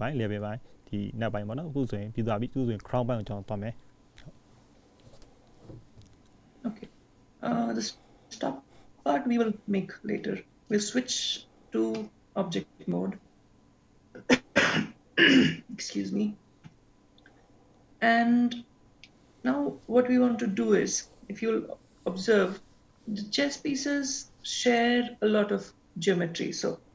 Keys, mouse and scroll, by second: 5.9 click, 9.3-9.6 scroll down 3, 10.7 click, 13.0-14.1 scroll down 5, 19.1 shift+middle click.